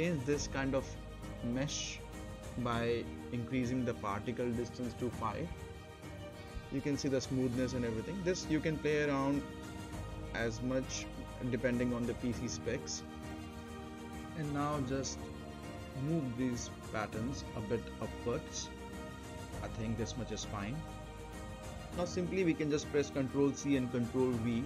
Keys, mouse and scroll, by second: 1.5 space, 2.7 click, 6.5 5, 7.3 click, 8.8 space, 13.5 space, 13.8 click, 14.5 right click, 15.3 middle click, 16.3-17.6 drag, 17.8 right click, 18.3 scroll up 1, 18.6 middle click, 18.9 right click, 19.8 space, 21.2 click, 21.4 shift+click, 21.6 scroll up 1, 21.7 middle click, 22.0 ctrl+c, 22.2 ctrl+v, 23.4 click, 23.8-24.2 right click, 24.2-24.6 scroll down 2, 24.3 right click, 24.6 right click.